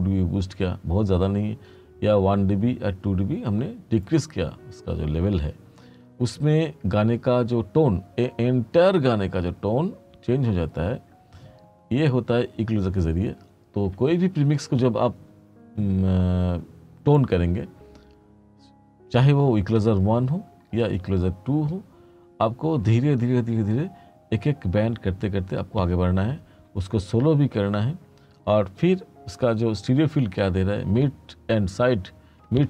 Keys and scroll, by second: 4.9-7.2 typing.